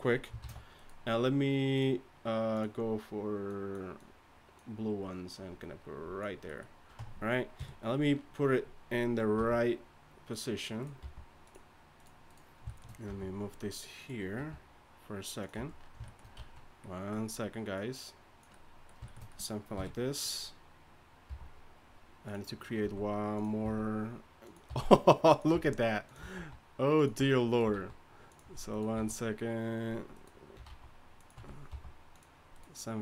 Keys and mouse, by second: 0.4 shift+d, 7.0 Tab, 7.6 KP_3, 9.4 g, 11.0 g, 13.1 g, 14.4 r, 15.5 z, 16.4 z, 19.7 KP_3, 21.3 g, 22.8 s, 23.6 e, 24.7 r, 25.5 s, 26.3 alt+s, 27.7 alt+s, 28.9 s, 30.7 alt+s, 31.7 g.